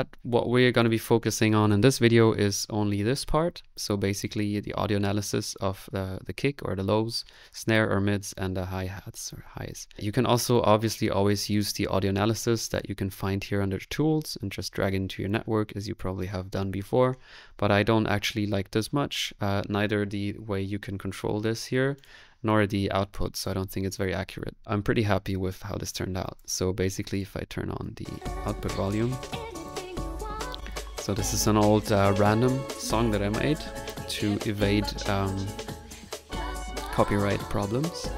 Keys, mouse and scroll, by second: 0.8-2.3 drag, 11.5 click, 12.8 click, 13.0 click, 15.4 click, 16.2-18.7 middle drag, 16.2 scroll up 1, 21.6 click, 22.0 click, 24.0 middle click, 24.7 middle click, 25.6 click, 26.1 click, 26.6 click, 26.6 middle click, 27.3 click, 28.2 click, 28.8 middle click, 29.6 click, 30.4 2, 30.6 click.